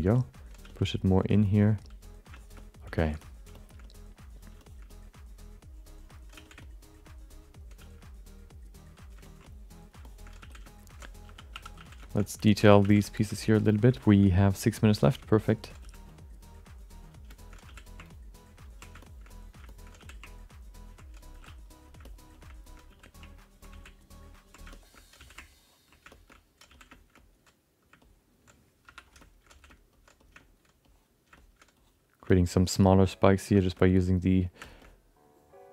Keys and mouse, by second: 0.1 alt+middle click, 0.6 f, 1.0 click, 1.2 click, 1.7 click, 1.9 click, 2.1 click, 2.3 alt+shift+middle click, 2.5 alt+middle click, 2.9 alt+shift+middle click, 3.2 alt+middle click, 3.5 alt+shift+middle click, 3.8 alt+middle click, 4.6 middle click, 4.9-6.1 alt+middle drag, 6.3 f, 6.6 alt+middle click, 7.8 f, 8.2 click, 9.2 ctrl+middle click, 9.4 alt+middle click, 10.0 alt+shift+middle click, 10.5-12.8 typing, 10.6 alt+shift+middle click, 12.0 alt+shift+middle click, 12.2 alt+middle click, 12.4 ctrl+alt+middle click, 13.0 alt+shift+middle click, 13.4 click, 13.7 click, 13.9 alt+shift+middle click, 14.2 middle click, 14.6 click, 15.2 alt+shift+middle click, 15.2 f, 15.4 alt+middle click, 15.8 f, 16.1 click, 16.5 click, 17.3 alt+shift+middle click, 17.6 f, 18.0 ctrl+click, 18.2 ctrl+click, 18.6 click, 19.0 alt+shift+middle click, 19.3 alt+middle click, 19.7 alt+shift+middle click, 20.1 f, 20.3 ctrl+click, 21.3 f, 21.6 click, 22.0 shift+middle click, 22.3 alt+shift+middle click, 22.8 f, 23.2 click, 24.0 ctrl+f, 24.0 ctrl+click, 24.7 alt+shift+middle click, 24.9 middle click, 25.2 f, 25.5 ctrl+click, 26.1 alt+shift+middle click, 26.3 alt+middle click, 26.6 f, 26.9 alt+shift+middle click, 27.2 alt+middle click, 28.0 middle click, 28.9 s, 29.2 alt+shift+middle click, 29.5 f, 30.4 alt+middle click, 30.8 click, 31.4 shift+middle click, 31.7 click, 32.3 alt+shift+middle click, 32.5 alt+shift+middle click, 33.0 click, 33.5 shift+middle click, 33.8 alt+middle click, 34.6 shift+middle click, 34.8-35.7 alt+middle drag.